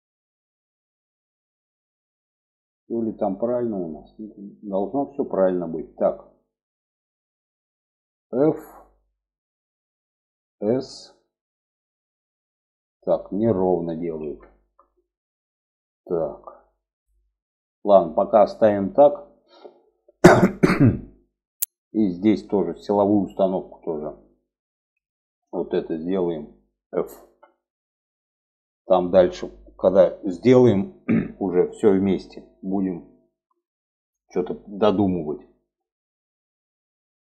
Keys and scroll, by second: 7.6 f, 10.0 s, 13.3 ctrl+z, 26.6 f.